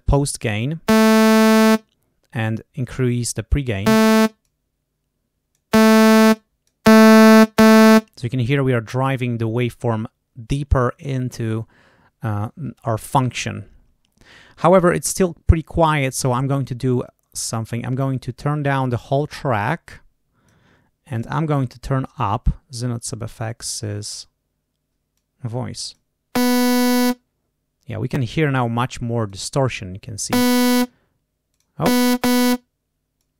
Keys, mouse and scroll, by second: 4.3-5.6 drag, 6.2 click, 16.0 click, 18.1-20.6 drag, 21.0 click, 24.0 click, 25.0 click, 28.1 click, 29.1 click, 31.4 click, 33.1-33.3 drag.